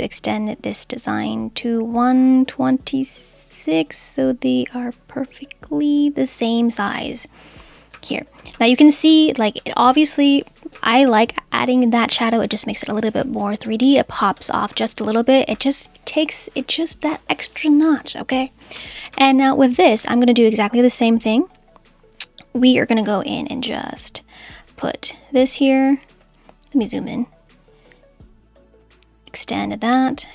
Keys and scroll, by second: 7.9 Right, 8.5 Left, 9.0 Left, 10.7 Right, 12.0 Right, 13.7 Left, 14.7 Right, 14.9 Left, 15.5 Right, 18.7 Right.